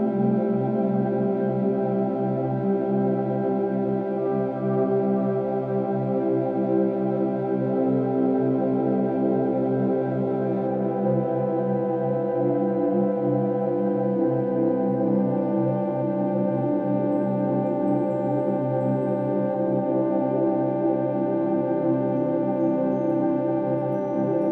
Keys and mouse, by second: 2.1 click, 3.2 click, 4.3 click, 7.2 click, 8.9 click, 11.0-12.0 drag, 12.2 click, 12.4 click, 13.9-15.7 drag, 16.3 click, 16.4 click, 17.5 click, 17.7 click, 18.9 click, 19.1 click, 23.1 click.